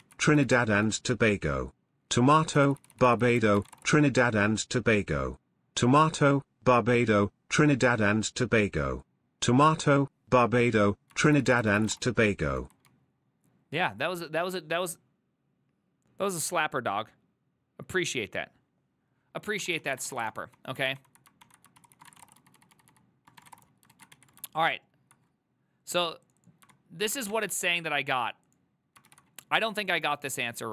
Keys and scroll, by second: 0.3-0.9 typing, 2.8 ctrl+c, 2.9 ctrl+c, 3.0-4.3 typing, 3.2 ctrl+c, 11.4 ctrl+c, 11.6 ctrl+c, 11.6-13.7 typing, 19.8-20.7 typing, 21.0 ctrl+d, 21.5 ctrl+d, 21.9 ctrl+c, 22.0-24.2 typing, 24.0 ctrl+a, 27.1 ctrl+shift+c, 27.2-28.0 typing, 29.2 ctrl+v.